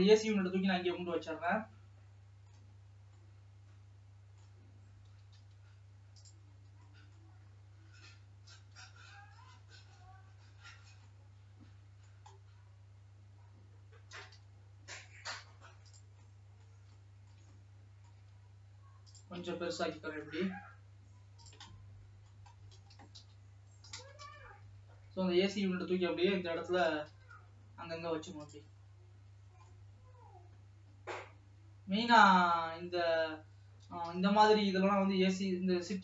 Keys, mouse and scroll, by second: 0.0 click, 0.7-1.7 scroll down 7, 1.7-2.8 middle drag, 2.8-3.3 scroll up 2, 3.3-4.7 middle drag, 4.7-5.3 scroll up 1, 5.3 g, 6.5-7.2 scroll up 4, 7.2 middle click, 7.6 scroll down 1, 8.6 g, 10.8-11.3 scroll down 4, 11.3-12.5 middle drag, 12.5-13.0 scroll up 5, 13.0 scroll down 1, 14.2 g, 16.4-18.5 middle drag, 18.5 s, 22.0 middle click, 22.8 scroll up 2, 23.0 r, 25.3 scroll up 1, 26.2 scroll down 1, 26.7 g, 28.8 scroll up 2, 29.5 scroll down 1, 29.8-33.9 middle drag, 33.9 g.